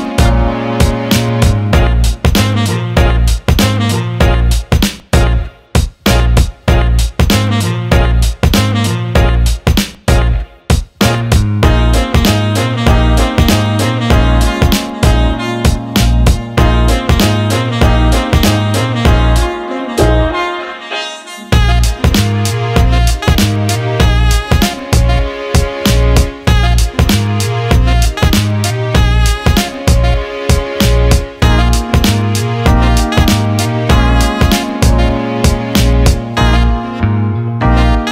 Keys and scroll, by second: 3.4 Escape, 16.4 Escape, 22.4 Delete, 23.4-24.2 typing, 37.7 ctrl+z.